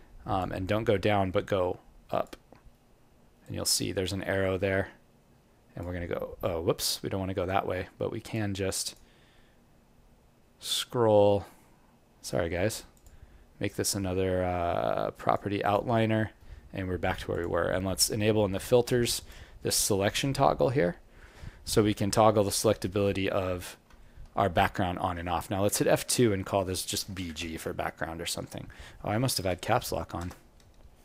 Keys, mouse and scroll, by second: 9.8-10.2 scroll down 1, 11.4 scroll down 4, 12.9 click, 12.9 scroll up 11, 23.0-23.3 scroll down 1, 23.6 scroll down 8, 24.0 alt+middle click, 25.6 F2.